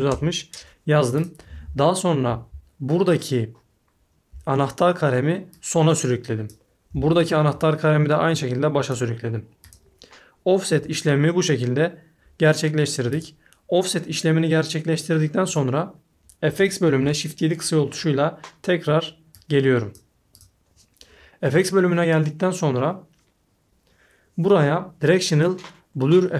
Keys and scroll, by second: 0.0-0.2 typing, 1.9 typing, 16.9 shift+7.